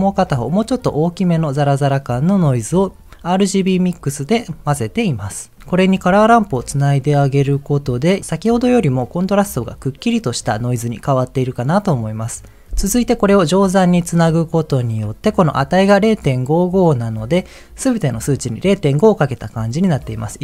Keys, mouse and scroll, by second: 3.9 ctrl+shift+click, 6.9 ctrl+shift+click, 8.7 ctrl+shift+click, 9.2 ctrl+shift+click, 9.7 ctrl+shift+click, 10.1 ctrl+shift+click, 14.7 ctrl+shift+click.